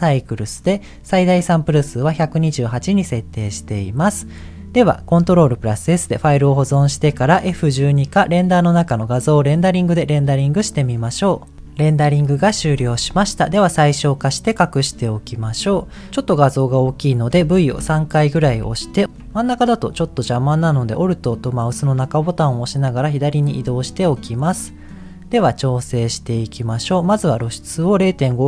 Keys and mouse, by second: 5.3 ctrl+s, 8.5-10.2 drag, 19.0 middle click, 19.0 t, 19.9 t, 20.4-23.6 middle drag, 24.4 middle click, 26.2 middle click, 27.8-28.4 drag.